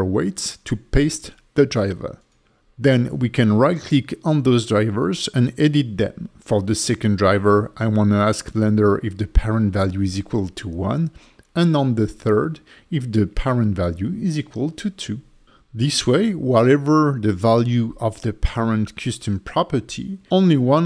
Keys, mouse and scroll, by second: 20.6 click.